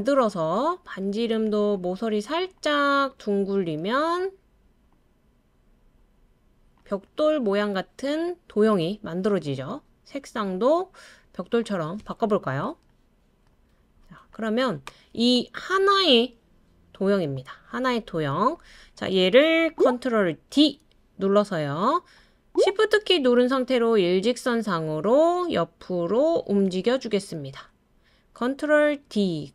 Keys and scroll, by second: 20.5 super+d, 29.1 super+d.